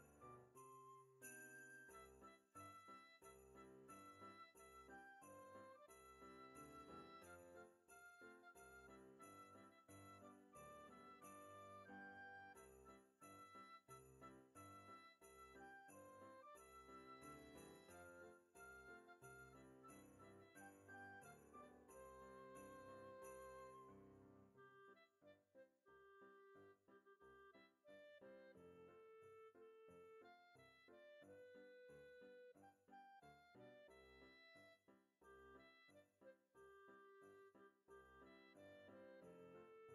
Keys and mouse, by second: 1.7 click, 2.7 click, 3.6 click, 4.2 middle click, 4.6 g, 4.6 z, 6.4 click, 6.8 Tab, 7.7 KP_1, 8.8 g, 8.8 z, 10.0 click, 11.5 F6, 12.5 Tab, 12.8 click, 14.6 x, 15.3 click, 16.1 Tab, 17.3 click, 17.9 g, 18.8 click, 19.3 Tab, 19.6 click, 20.4 F6, 21.1 click, 23.6 click, 25.7 click, 27.5 click, 28.2 ctrl+Tab, 30.7 click, 32.0 click, 33.2 click, 35.7 click, 37.4 middle click, 37.9 click, 39.5 middle click.